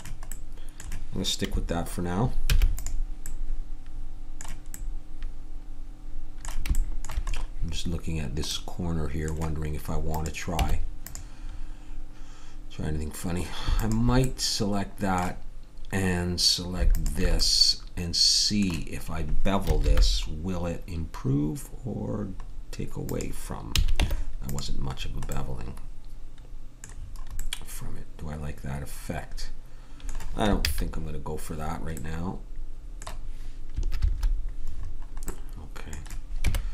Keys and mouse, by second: 2.4 ctrl+s, 10.1 middle click, 10.6 Tab, 19.8 ctrl+b, 23.7 a, 23.9 Tab, 30.6 ctrl+z, 34.0 ctrl+z, 36.4 Tab.